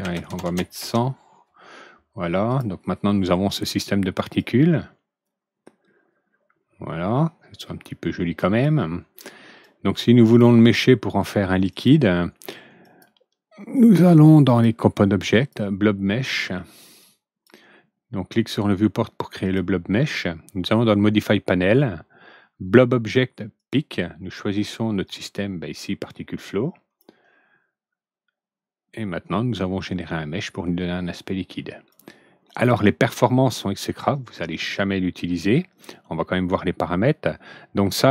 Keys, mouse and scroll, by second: 0.0 ctrl+n, 2.4 click, 4.1 click, 9.6 click, 11.6 click, 12.8 click, 14.4 click, 15.3 click, 16.9 click, 19.4 click, 23.5 click, 25.0 click, 26.9-31.8 drag, 33.5 click.